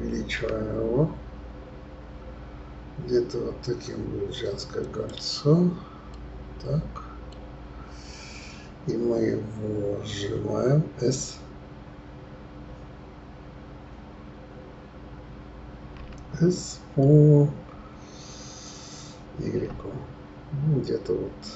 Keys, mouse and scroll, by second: 0.3 s, 6.1-7.7 middle drag, 16.0 s.